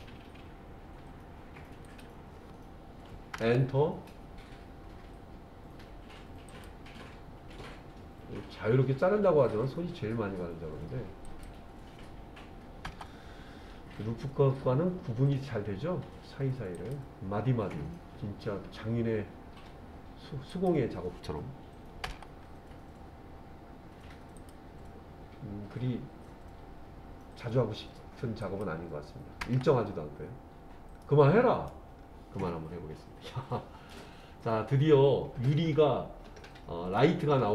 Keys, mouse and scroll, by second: 6.5-12.9 drag, 16.8-22.1 drag, 24.4-29.5 drag, 31.0 middle click, 32.0-32.4 scroll down 1, 33.2-33.9 scroll down 1, 33.9-37.0 middle drag.